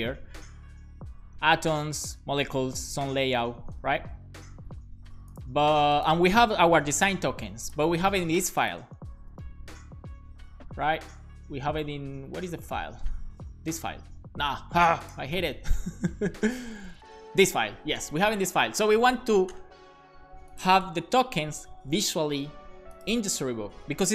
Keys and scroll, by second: 9.3 ctrl+Tab, 11.1 ctrl+Tab, 15.4 ctrl+Tab, 17.2 ctrl+Tab.